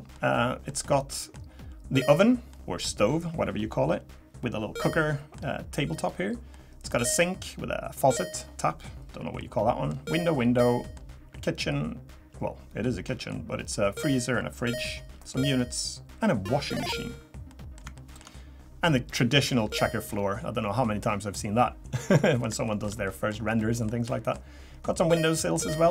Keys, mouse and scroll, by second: 0.1 middle click, 0.8 middle click, 2.5 middle click, 4.8 middle click, 5.9 scroll down 1, 6.5 middle click, 9.4 middle click, 10.6 middle click, 13.2 middle click, 14.4 scroll down 1, 17.5 middle click, 20.1 scroll down 2, 22.2 middle click, 22.6 shift+middle click, 23.6 middle click, 25.2 middle click, 25.7 shift+middle click.